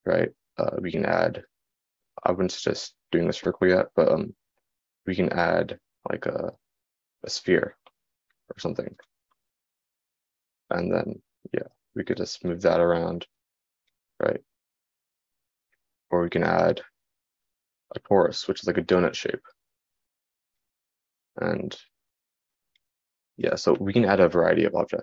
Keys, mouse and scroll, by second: 14.6-18.1 drag.